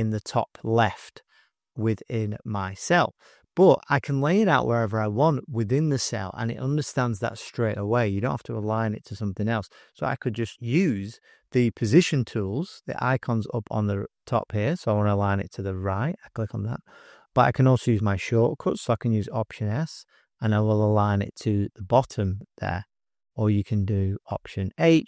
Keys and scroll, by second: 10.5 typing, 19.8 alt+s, 24.2 alt+h.